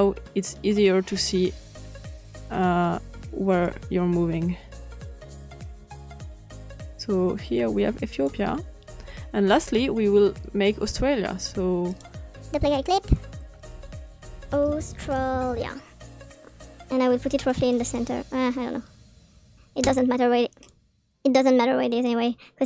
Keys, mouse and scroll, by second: 0.3-0.7 scroll up 2, 1.1 click, 3.6-8.2 drag, 11.8 right click, 12.6 click, 13.3 click, 15.2 click, 15.7 click, 16.1 click, 16.6-17.5 typing, 18.2 click, 18.7-20.5 drag, 21.0 click.